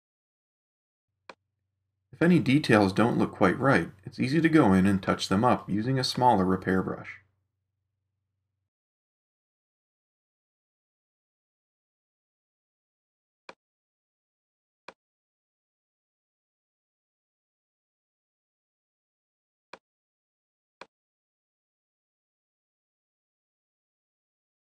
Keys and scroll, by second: 1.0 super+space, 3.7 [, 23.6 super+0.